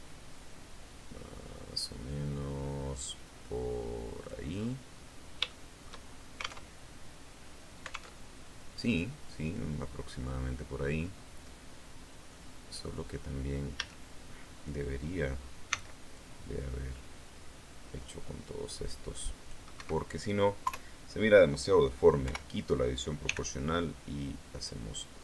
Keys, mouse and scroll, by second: 4.0 click, 4.4-5.3 scroll down 2, 5.4 shift+right click, 6.6 alt+Tab, 8.1 alt+Tab, 9.8-10.4 scroll up 1, 10.4-11.0 scroll down 1, 12.2 right click, 13.7 a, 15.6 c, 16.0-19.6 drag, 19.7 Escape, 20.6 KP_3, 22.1 o, 23.2 g.